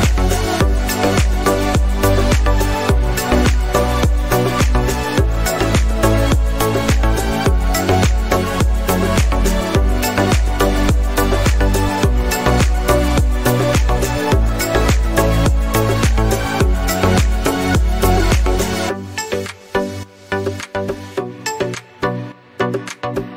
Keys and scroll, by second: 9.4 Return, 21.2 a.